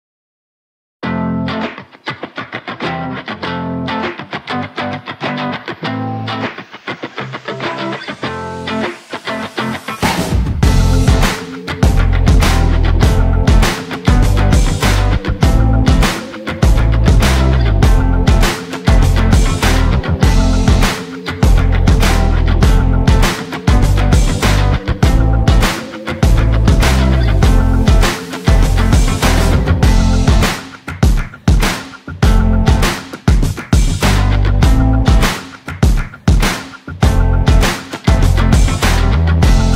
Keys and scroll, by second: 14.9 Return, 17.5 BackSpace, 20.7 Left, 26.5 BackSpace, 28.5 Return.